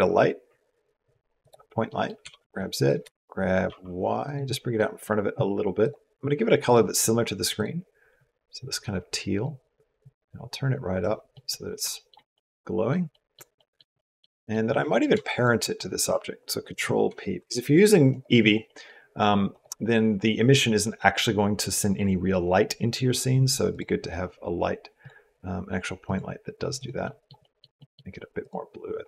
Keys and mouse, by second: 1.8 middle click, 1.8 click, 2.0 g, 2.8 g, 4.3 click, 5.7 click, 6.5 click, 9.9 click, 11.2 middle click, 11.7 shift+middle click, 12.1 middle click, 12.9 middle click, 13.4 middle click, 13.8 click, 14.2 click, 15.2 shift+click, 16.5 ctrl+p, 18.0 click, 18.5 click, 19.4 click, 26.6 click, 27.2 click, 27.6 click, 28.2 click.